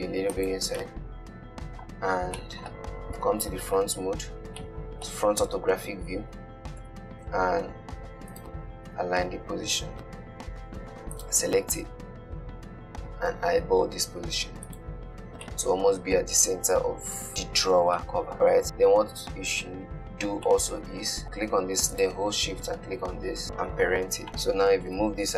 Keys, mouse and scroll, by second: 0.4 scroll down 1, 0.7 click, 1.2-2.4 middle drag, 2.4-2.7 scroll down 2, 2.7-3.4 middle drag, 3.4 KP_1, 4.9-7.1 shift+middle drag, 7.1 g, 7.5 z, 9.2 g, 9.5 z, 11.4 click, 11.8 g, 15.5 scroll down 2, 15.7-18.8 middle drag, 18.8 click, 20.8-21.2 middle drag, 21.5 click, 22.2 shift+click, 23.7 ctrl+p, 24.3 click, 25.0 g.